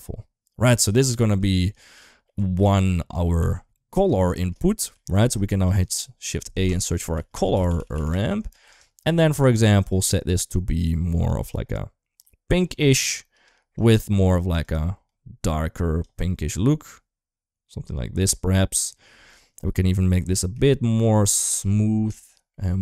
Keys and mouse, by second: 0.7 middle click, 1.5 click, 1.7 click, 2.5-3.0 drag, 3.2 g, 4.2 shift+middle click, 4.6 g, 5.3 shift+a, 7.7 r, 9.3 click, 9.6-9.9 drag, 13.2 click, 13.5 click, 20.5 shift+middle click, 21.2 shift+middle click, 22.4 middle click.